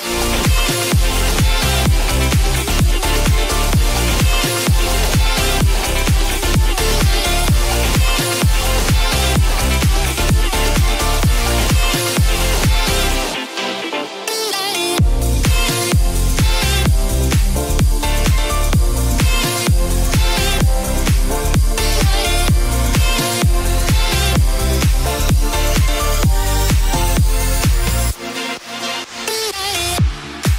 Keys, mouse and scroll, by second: 25.6-25.9 middle drag, 26.3-27.4 scroll up 1, 27.4 Tab, 27.4 scroll up 1, 28.2 click, 28.6 middle click, 29.3 click, 30.4 middle click.